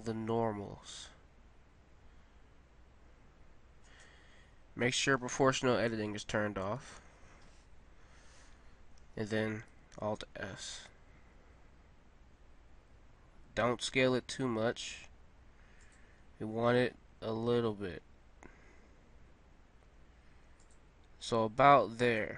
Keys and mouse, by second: 7.0 alt+o, 10.6 alt+s, 17.0 alt+s, 21.4-22.3 middle drag.